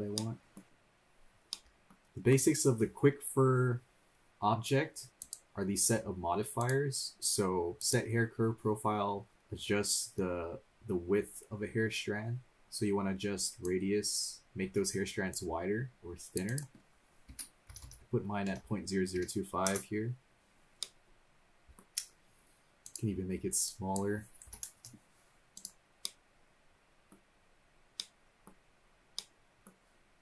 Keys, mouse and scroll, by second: 0.1 middle click, 0.7-1.0 scroll up 1, 1.0 scroll down 1, 1.5-1.9 middle drag, 4.3 click, 4.4-5.1 scroll down 2, 5.2 click, 6.6 click, 7.8 click, 9.3 scroll up 2, 13.6 click, 15.3-19.7 drag, 17.8 0, 20.8-21.8 middle drag, 22.8-24.8 drag, 25.5 click, 26.0-27.1 middle drag, 27.4-27.8 scroll down 2, 27.9-28.5 middle drag, 28.7 scroll up 2, 29.2-29.7 middle drag.